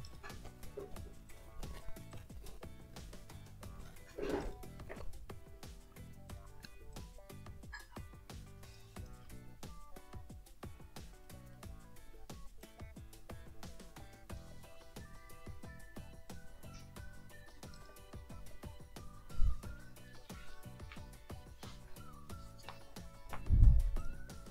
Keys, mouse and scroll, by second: 0.0 click, 1.3 ctrl+click, 1.5 ctrl+scroll up 1, 2.1-4.0 ctrl+drag, 4.1 scroll down 2, 4.4 ctrl+click, 6.3 click, 6.9 click, 8.0 ctrl+click, 9.1 ctrl+click, 9.3 ctrl+click, 9.7 scroll up 1, 11.2-11.7 scroll up 1, 12.6 click, 13.8 ctrl+click, 16.3-17.7 ctrl+drag, 17.9 ctrl+click, 24.0 ctrl+click, 24.4 ctrl+scroll up 2.